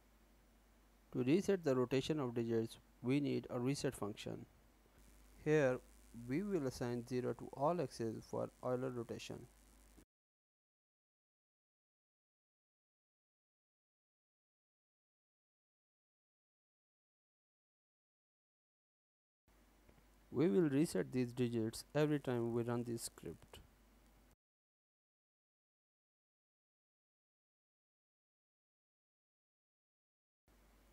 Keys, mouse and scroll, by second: 0.6 click, 1.5 Return, 1.9 Return, 2.6-4.6 typing, 4.6 Return, 5.4 Return, 5.8 n, 6.0 click.